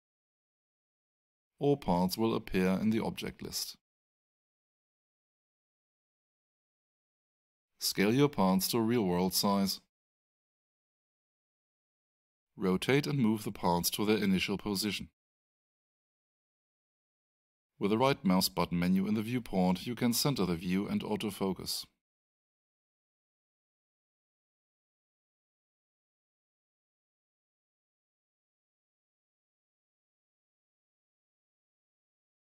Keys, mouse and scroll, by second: 1.9 click, 7.5-9.2 typing, 9.9 shift+Return, 12.0 click, 13.9-14.7 typing, 15.4 Return, 16.9 right click, 19.3 click, 23.2 alt+right click, 24.4 alt+middle click, 26.7 right click.